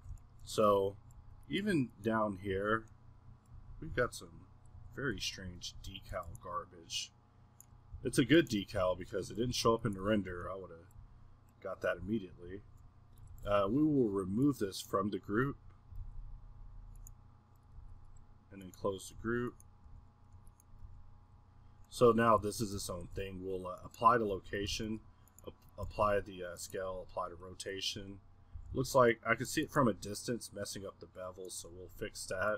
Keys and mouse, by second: 0.0 z, 1.0 middle drag, 1.2 a, 1.7 middle click, 2.6 z, 3.0 middle click, 3.0 click, 3.1 middle click, 3.2 click, 3.3 middle click, 3.6 z, 3.9 z, 4.8 Tab, 5.1 a, 5.5 a, 5.7 a, 6.1 a, 7.9 x, 8.8 z, 9.6 Tab, 10.3 z, 10.6 middle click, 11.0 z, 11.6 click, 11.9 z, 12.9-13.3 middle drag, 14.3-16.0 middle drag, 17.1 middle click, 19.2 z, 19.9 g, 21.0 g, 21.9-23.0 middle drag, 24.0 middle click, 24.3 z, 26.9 z, 27.5 middle click, 28.0 middle click, 28.3 middle click, 28.5 q, 29.6-30.8 middle drag, 31.8-32.5 middle drag.